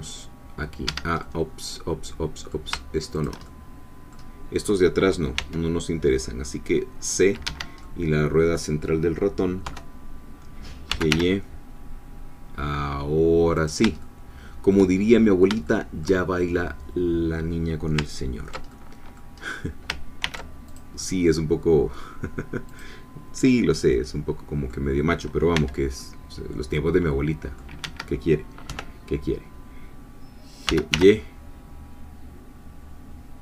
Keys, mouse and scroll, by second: 0.9 Escape, 1.2-2.7 middle drag, 3.1 shift+click, 3.4 shift+middle click, 5.4 c, 6.1-9.6 middle drag, 7.4 Escape, 9.6 3, 10.9 g, 11.1 y, 13.6 shift+click, 14.0 shift+middle click, 15.1-15.4 shift+scroll up 2, 15.6 shift+middle click, 18.7 ctrl+middle click, 19.4 scroll down 2, 20.2 ctrl+r, 20.7 ctrl+click, 22.7-23.9 drag, 23.9 middle click, 25.5 c, 26.0-27.7 middle drag, 27.8 Escape, 28.7 3, 30.7 g, 30.9 y.